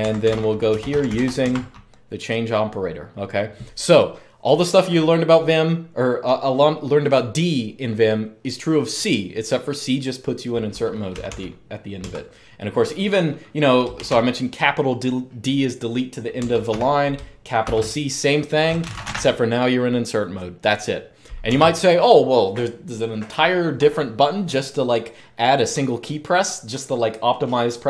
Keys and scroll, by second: 0.0-1.4 typing, 10.9 typing, 11.8 Escape, 13.7 shift+d, 16.3 Escape, 16.4-19.2 typing, 21.3 Escape.